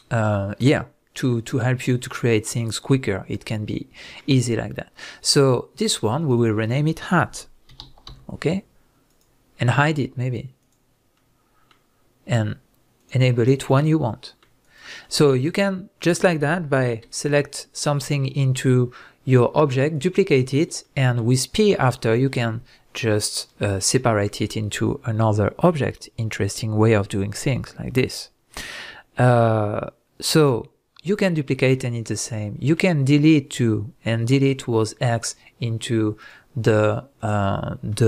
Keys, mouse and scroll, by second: 6.2 click, 6.4-9.2 drag, 10.6 click, 11.1-13.0 middle drag, 13.0 click, 13.6 click, 14.1-14.6 middle drag, 14.6 click, 15.0 scroll down 1, 15.3-19.9 middle drag, 17.0 Tab, 17.4-19.9 scroll up 1, 19.9 click, 20.8-36.2 middle drag, 36.2 click, 37.2 click, 37.9-38.0 middle drag.